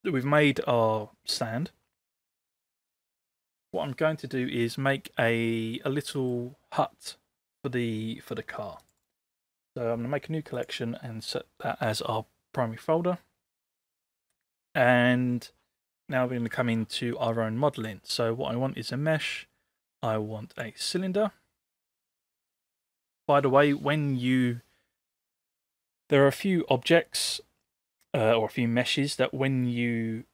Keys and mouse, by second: 1.4 middle drag, 6.2 middle click, 9.0 right click, 9.5 middle click, 17.8-20.7 drag.